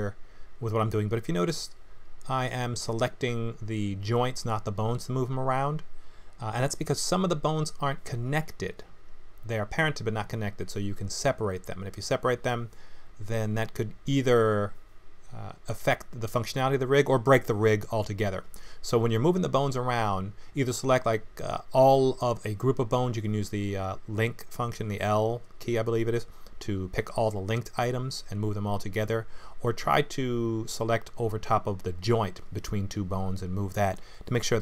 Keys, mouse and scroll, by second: 0.3 click, 0.5 g, 2.1 click, 3.1 click, 3.7 click, 4.6 click, 5.0 middle click, 5.4 g, 6.4 middle click, 8.2 click, 8.6 middle click, 9.5 click, 10.8 click, 11.1 g, 11.8 click, 12.1 g, 13.1 click, 13.4 g, 15.1 middle click, 15.9 g, 16.6 middle click, 18.1 click, 18.8 click, 19.3 middle click, 20.6 click, 21.0 g, 21.9 middle click, 22.9 click, 23.1 g, 23.7 click, 23.9 g, 25.7 ctrl+z, 26.3 click, 27.1 g, 28.8 g, 29.7 middle click, 30.9 click, 31.7 g, 32.6 scroll down 1, 32.7 middle click.